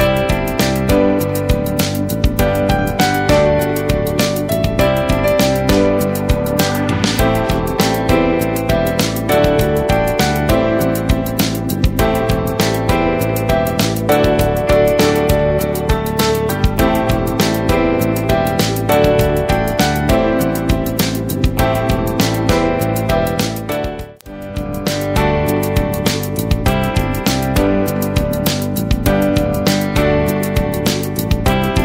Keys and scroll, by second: 2.8 ctrl+a, 7.0 alt+Up, 9.1 alt+Down, 16.1 Right, 16.9 Up, 17.1 Right, 17.3 Up, 17.6 Right, 19.7 Up, 19.9 Right, 24.2 space, 26.5 ctrl+space, 26.9 ctrl+space, 28.7 space, 30.6 space.